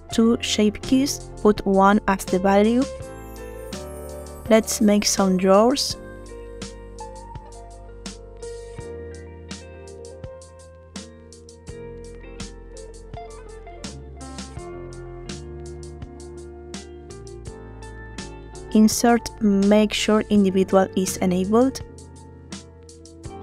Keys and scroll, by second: 5.7 Tab, 18.5 i.